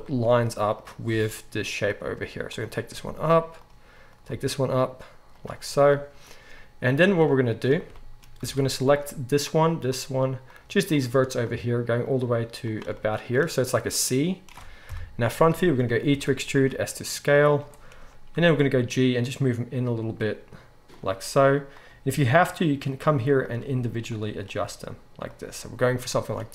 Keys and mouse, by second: 0.7 click, 0.8-2.5 middle drag, 1.1 g, 2.5 click, 2.6-4.2 middle drag, 2.9 g, 4.2 click, 4.3-6.1 middle drag, 4.3 g, 6.1 shift+click, 6.8-8.9 middle drag, 8.4 alt+a, 8.9 click, 9.0-10.4 shift+middle drag, 10.4 shift+click, 10.6 shift+middle click, 10.9 shift+click, 11.0 shift+middle click, 11.5 shift+click, 12.1-23.4 shift+middle drag, 14.8 KP_1, 16.1 e, 18.3 g, 22.0 g, 23.4 click, 23.5-26.5 middle drag, 23.6 g, 24.6 g.